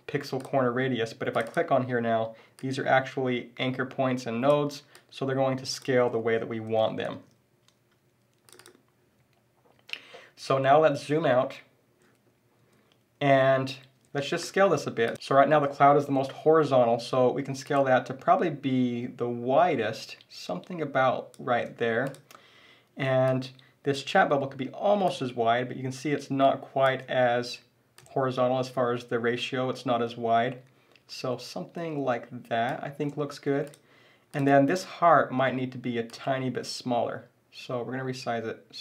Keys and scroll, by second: 6.2 super+z.